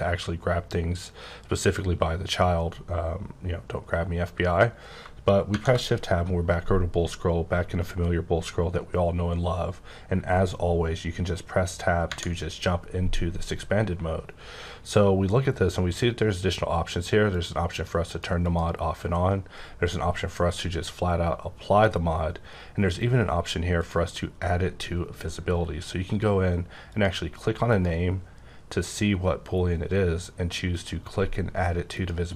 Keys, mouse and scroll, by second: 2.4-3.0 scroll up 6, 3.4 scroll down 5, 5.5 shift+Tab, 6.6-8.7 scroll up 9, 8.7-9.1 scroll up 1, 9.2-11.0 scroll up 2, 12.0 Tab, 17.3 click, 17.7 click, 18.1 click, 18.4 click, 23.8 click, 26.9 click, 27.7 click, 30.8 click, 31.9 click.